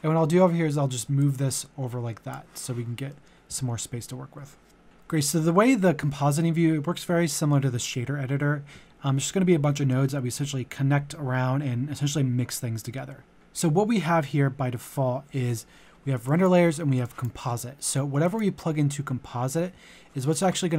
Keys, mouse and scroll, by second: 3.1 middle click, 13.3-20.7 drag.